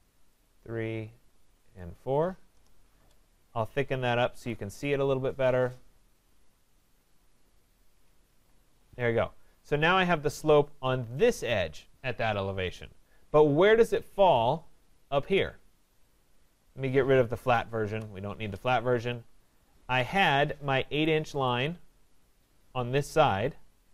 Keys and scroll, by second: 2.5 Return.